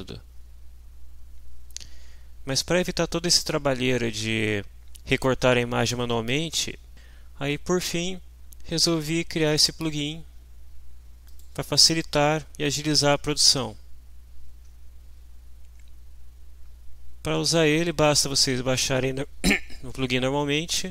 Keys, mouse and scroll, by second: 2.6-2.9 scroll down 2, 4.1 scroll down 2, 5.6 scroll down 2, 11.3 click.